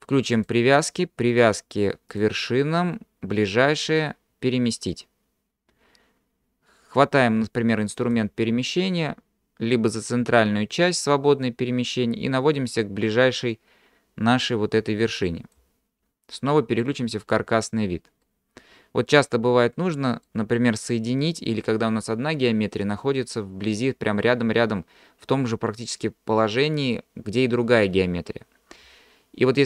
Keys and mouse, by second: 1.5-5.8 drag, 8.1 click, 11.5-15.6 drag, 17.3 click, 18.3-20.3 middle drag.